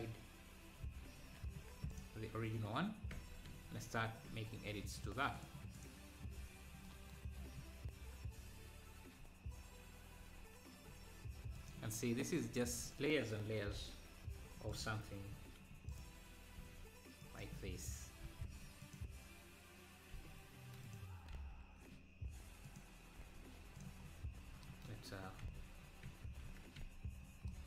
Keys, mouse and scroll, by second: 1.1 alt+h, 1.9-3.2 drag, 3.2 Tab, 5.4 click, 12.9-13.7 scroll up 3, 15.3 i, 16.6 e, 18.3 i, 20.2 e, 21.4 e, 23.3 e, 24.1 scroll down 1, 25.5 e, 26.5 Tab, 26.5 z, 27.3 scroll up 1.